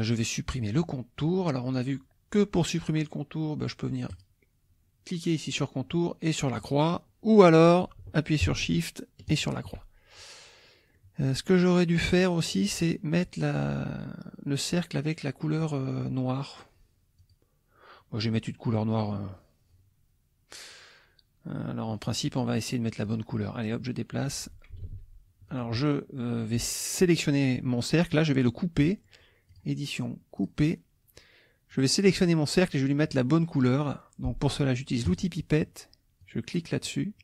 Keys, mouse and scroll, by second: 0.1 click, 4.1 click, 6.6 click, 9.3 shift+click, 10.9 click, 15.6 click, 17.2 click, 21.9 click, 23.0 click, 24.9 ctrl+z, 25.5 click, 29.5 click, 30.4 click, 31.7 click, 35.1 click, 36.2 click.